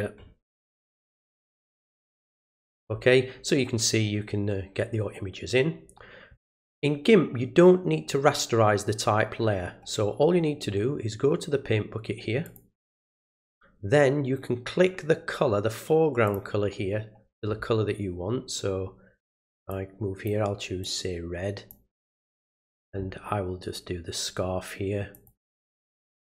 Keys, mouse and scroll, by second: 12.4 click, 16.2 click, 19.7 click, 20.8 click, 22.4 click, 25.1 click.